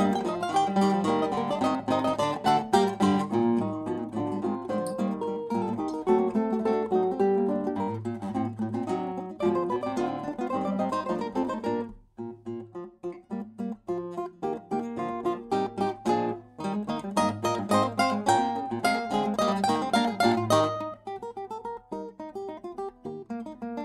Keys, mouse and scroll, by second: 0.4-2.0 middle drag, 2.0-4.5 right drag, 4.5 middle click, 5.4-8.0 drag, 9.3 BackSpace, 9.5 BackSpace, 10.1 BackSpace, 17.8-23.8 right drag.